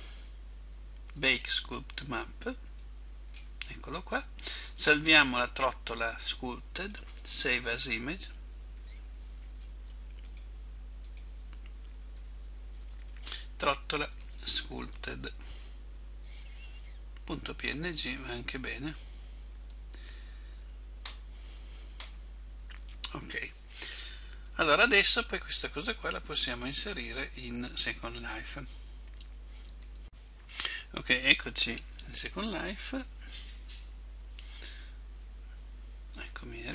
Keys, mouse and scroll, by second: 22.2 Return.